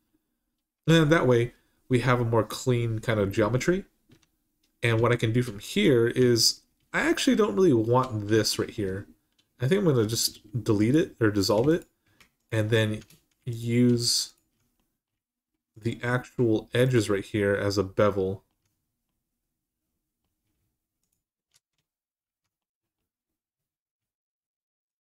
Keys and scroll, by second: 3.9 Tab, 10.0 x.